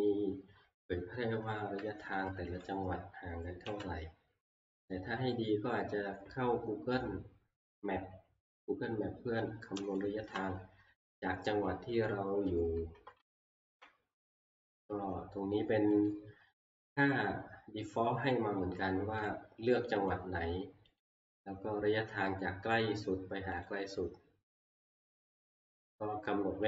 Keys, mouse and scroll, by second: 3.7 ctrl+Page_Up, 10.0 click, 12.1 click, 12.5 Right, 12.9 Right, 13.2 Right, 13.7 Right, 14.3 scroll down 3, 16.0 scroll, 16.1 click, 19.3 click, 20.1 click, 21.0 click, 23.6 click, 24.9 click, 25.7 click.